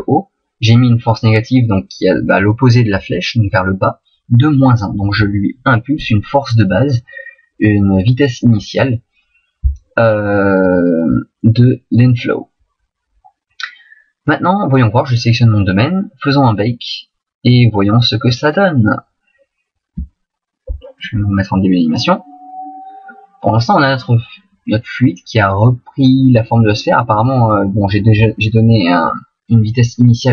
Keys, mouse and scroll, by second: 15.1 right click, 18.2 click, 21.9 click.